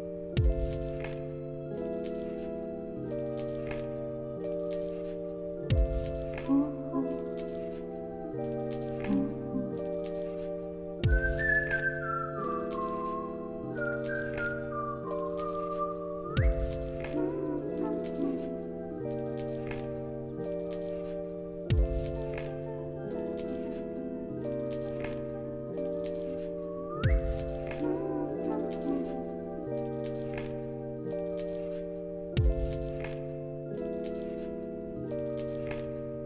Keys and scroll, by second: 5.1 u, 8.8 u, 11.2 x.